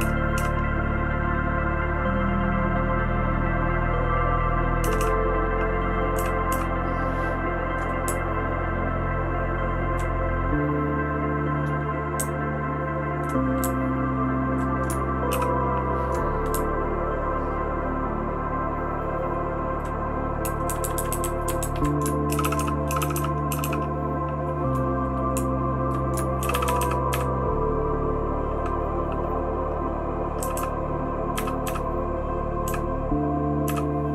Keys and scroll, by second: 0.0-0.3 typing, 4.8 }, 5.0 }, 6.1 {, 6.5 {, 8.0 Down, 8.5-9.9 Down, 12.2 Up, 12.7-13.2 Up, 13.6-14.5 Down, 15.3 }, 16.5 Down, 17.0-19.8 Down, 20.7 Down, 20.8 Down, 20.9 Down, 21.1 Down, 21.2 Down, 21.3 Down, 21.4 Down, 21.6 Down, 21.7 Down, 22.3-23.6 typing, 25.3 Down, 25.8 Down, 26.4-27.1 typing, 30.4 {, 30.5 {, 31.3 {, 31.6 {, 32.6 {.